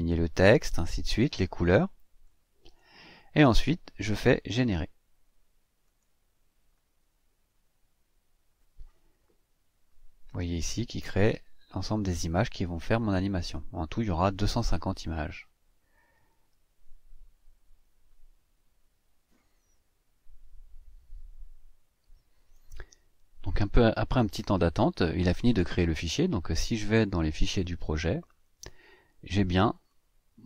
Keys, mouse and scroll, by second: 5.8 click, 27.4 click, 29.7 click.